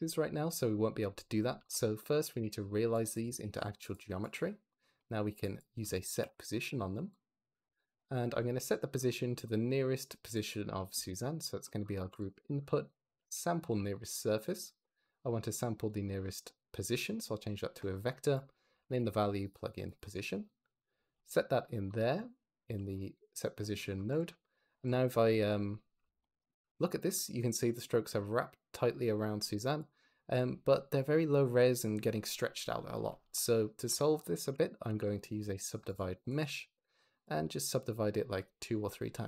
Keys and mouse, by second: 1.5 shift+a, 4.1 drag, 5.3 click, 5.7 shift+a, 7.3 click, 7.7 click, 10.1 click, 10.4 click, 11.0 shift+d, 11.3 click, 11.9 g, 15.2 click, 22.3 g, 22.5 x, 22.8 click, 23.5 click, 24.4 click, 29.3 z, 32.3 click, 33.1 shift+a, 36.2 click, 37.0 click.